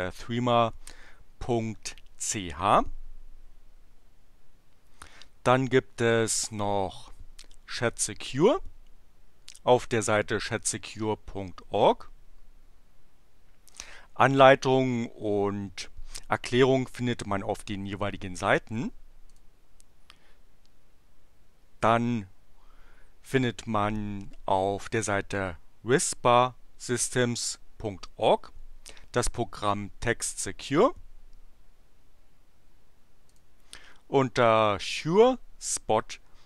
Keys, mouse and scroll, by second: 6.1 click, 19.2 click, 33.3 click.